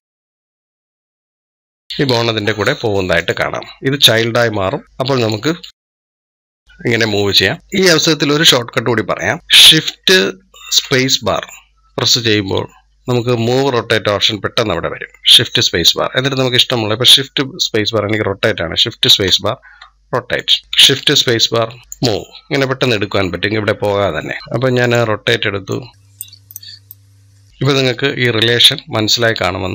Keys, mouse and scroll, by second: 3.0-4.5 drag, 4.5 e, 5.0-7.3 drag, 7.6 scroll down 2, 10.6 shift+space, 18.9 shift+space, 20.6 shift+space, 24.1 middle click, 24.4 shift+space, 25.5-26.3 drag, 26.4 drag.